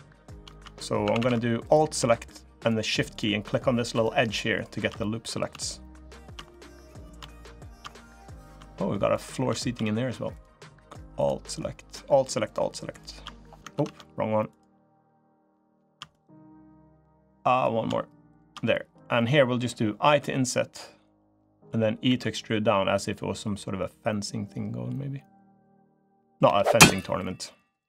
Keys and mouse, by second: 0.8 a, 0.9 a, 3.7 alt+shift+click, 4.7 middle click, 5.9 alt+shift+click, 6.3 middle click, 7.7 middle click, 10.1 alt+shift+click, 11.6 alt+shift+click, 13.5 ctrl+z, 14.2 alt+shift+click, 15.2 alt+shift+click, 15.9 click, 17.0 click, 18.1 alt+shift+click, 18.5 click, 19.8 i, 21.8 e, 26.2 g.